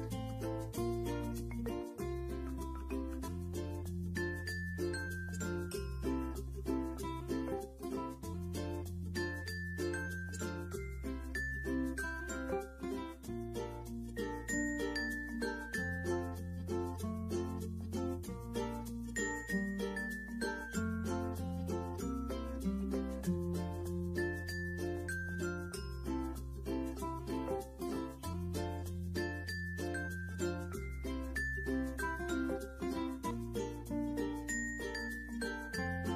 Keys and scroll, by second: 5.6-6.0 typing, 16.5-17.3 typing, 20.6 ctrl+d, 24.1 space, 29.7 Delete.